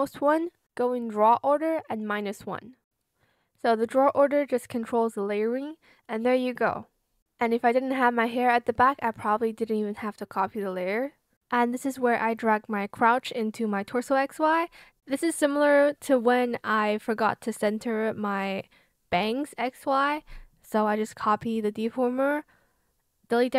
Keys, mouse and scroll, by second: 19.6 ctrl+c, 19.8 ctrl+v, 21.5 shift+click.